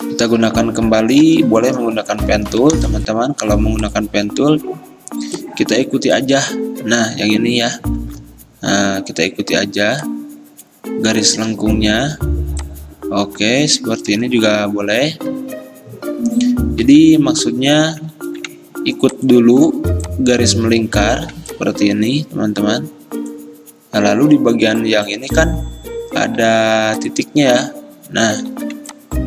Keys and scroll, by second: 1.4 p, 8.1 x, 14.3 ctrl+z, 14.5 ctrl+z, 16.9 ctrl+z, 17.3 ctrl+z, 21.3 ctrl+z, 25.2 ctrl+z, 26.5 ctrl+z, 28.6 ctrl+z.